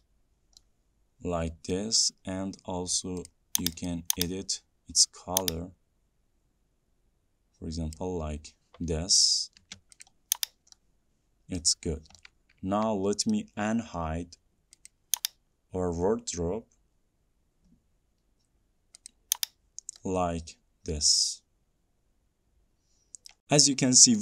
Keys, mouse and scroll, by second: 11.7 middle click, 11.7 click, 12.0 scroll, 12.2 scroll down 1, 12.3 middle click, 13.2-13.7 scroll, 13.7 scroll, 14.1 scroll down 2, 15.2 middle click, 15.2-17.9 drag, 20.2-21.8 drag, 23.7-24.2 scroll.